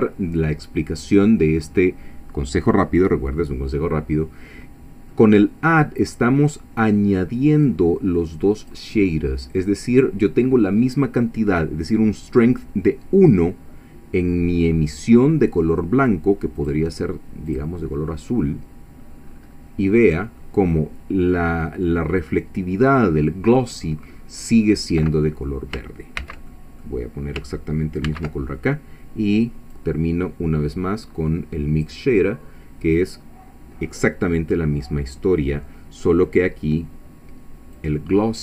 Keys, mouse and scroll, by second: 5.1-7.2 middle drag, 7.6-8.9 drag, 16.6 click, 17.5 click, 19.2-19.7 scroll up 1, 20.1-20.4 scroll up 1, 26.2 ctrl+c, 26.5 ctrl+middle click, 28.0 ctrl+v, 29.7-32.1 drag, 37.8-38.4 drag.